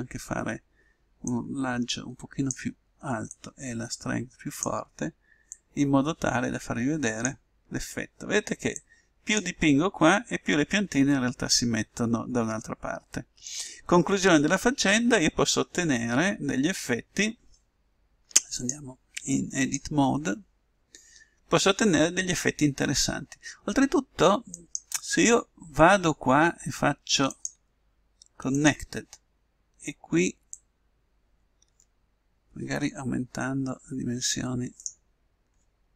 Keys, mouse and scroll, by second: 1.3-3.2 drag, 3.4-5.3 drag, 5.5-7.4 drag, 8.7-10.5 drag, 11.1-12.9 middle drag, 19.7 click, 24.5-26.4 right drag, 27.3-29.0 drag, 29.0 middle click, 30.5-32.2 drag, 35.5-35.9 middle drag.